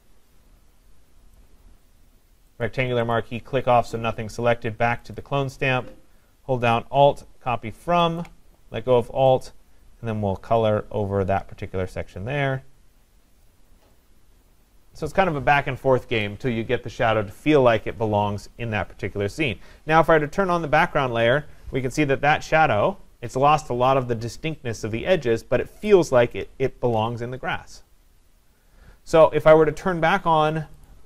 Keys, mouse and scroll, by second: 1.4 click, 2.7 click, 3.1 click, 5.2 click, 8.2 alt+click, 8.3 alt+click, 13.5 click, 14.3 click, 15.1 click, 20.5 click, 22.9-29.2 drag, 30.9-31.0 drag.